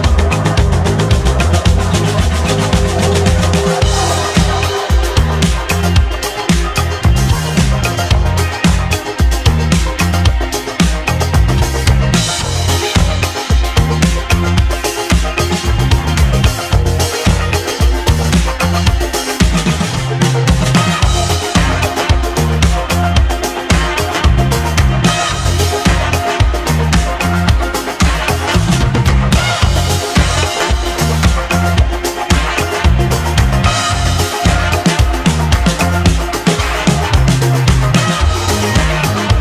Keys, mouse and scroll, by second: 6.6-7.1 scroll down 1, 7.1-10.1 shift+middle drag, 10.7 shift+s, 12.3 shift+s, 15.7-16.2 scroll down 2, 16.2-17.6 shift+middle drag, 17.6 shift+a, 20.9 Tab, 22.0 shift+a, 23.7 shift+a, 26.0 s, 34.3-36.8 middle drag, 37.2-38.1 drag, 39.2-39.4 scroll up 3.